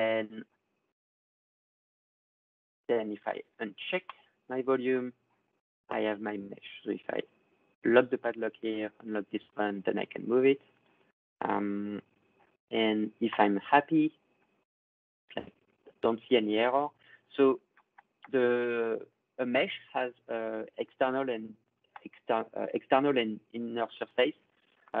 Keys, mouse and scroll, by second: 4.0-5.0 drag, 6.6 click, 8.5 click, 10.4 click, 14.2 click, 15.1 click, 15.7 click, 16.6 click, 17.4 click, 24.7 click.